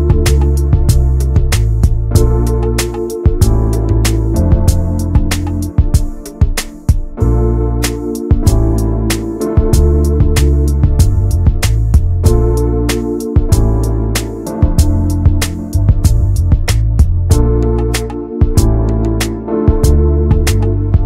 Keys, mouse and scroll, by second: 2.3-4.9 drag, 6.9 Tab, 7.1 click, 7.3 middle click, 7.8 ctrl+s, 7.9 click, 8.1-9.2 right drag, 9.2 click, 9.4-10.1 scroll down 5, 9.7 middle click, 10.1 shift+middle click, 10.7 ctrl+s, 10.9 middle click, 11.1 scroll up 1, 11.3 Tab, 11.8 click, 12.0 scroll up 2, 12.2 middle click, 12.6 3, 12.7 click, 14.2-15.3 middle drag, 15.3 s, 16.6 middle click, 16.7-17.2 scroll up 2, 17.0 middle click, 17.3 s, 18.0 middle click, 19.9-21.0 middle drag.